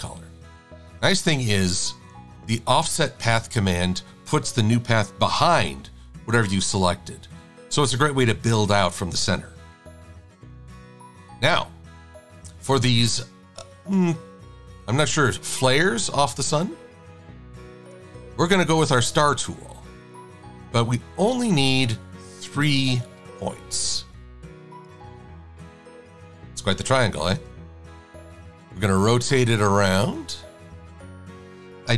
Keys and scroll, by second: 10.2 super+=, 10.5 super+=, 22.6 KP_3, 27.8 e.